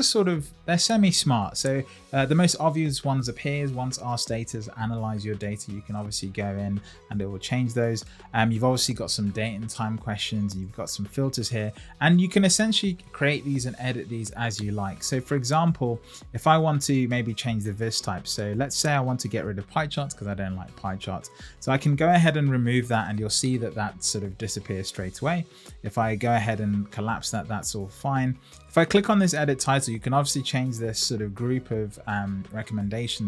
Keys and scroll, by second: 30.7 Right.